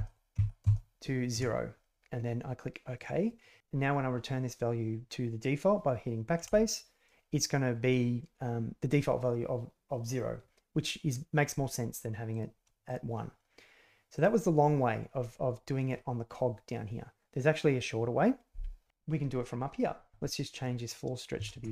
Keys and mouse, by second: 6.4 BackSpace, 12.2 click, 12.8-15.6 drag, 20.1-21.7 drag.